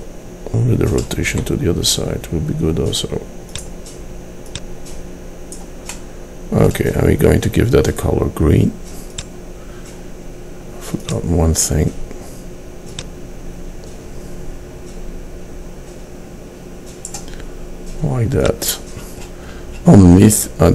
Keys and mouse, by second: 1.4 r, 4.6-6.2 drag, 13.0-18.5 middle drag.